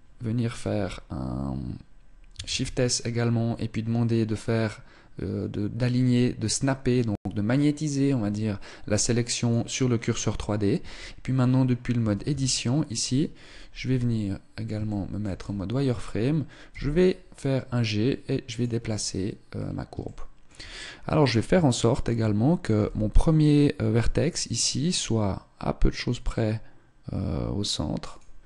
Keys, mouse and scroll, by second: 2.1 shift+s, 10.4 Tab, 11.5 a, 11.9 a, 13.3 z, 14.4 shift+middle click, 14.5 scroll down 2, 16.3 g, 18.5-20.0 scroll up 3, 19.1 shift+middle click, 20.0-20.9 scroll up 1, 20.9 shift+middle click, 20.9-22.3 scroll up 1, 22.3 g, 28.2-28.4 scroll down 2.